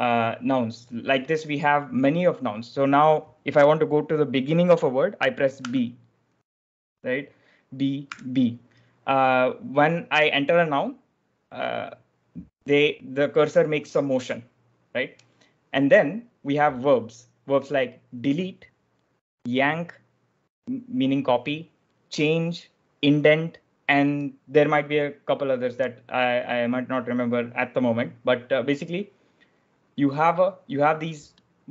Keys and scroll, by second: 5.5 b, 8.0 b.